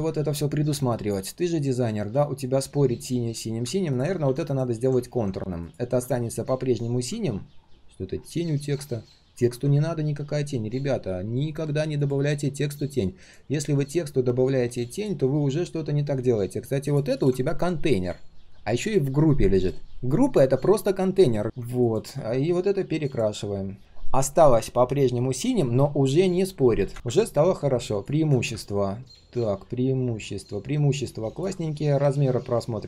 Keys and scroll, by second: 31.5 ctrl+shift+3.